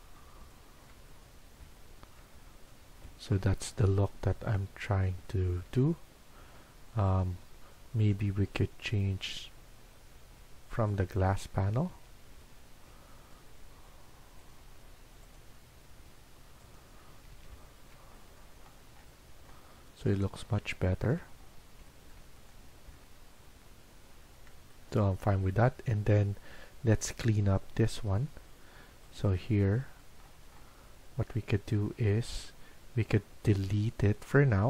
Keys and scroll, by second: 11.8 Escape, 17.0 Escape, 17.3 Escape.